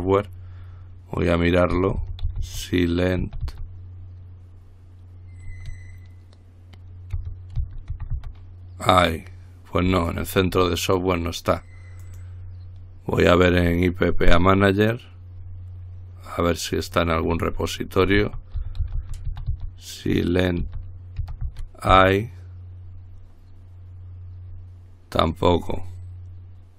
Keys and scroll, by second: 2.0-3.7 typing, 7.8-8.4 typing, 18.4-19.7 typing, 20.8-22.4 typing, 22.1 Return.